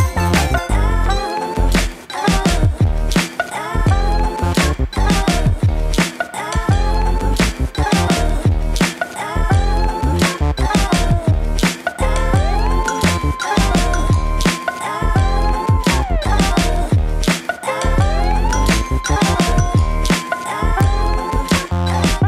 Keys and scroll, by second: 17.5 alt+space.